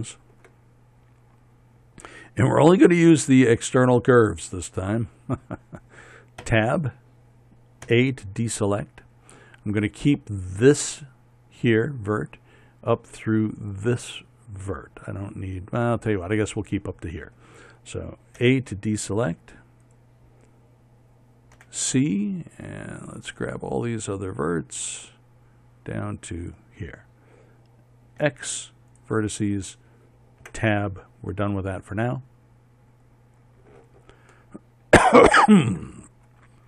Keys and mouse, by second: 7.1 Tab, 8.5 a, 19.0 a, 20.5 right click, 20.8-22.2 drag, 22.2 c, 28.8 x, 31.1 Tab.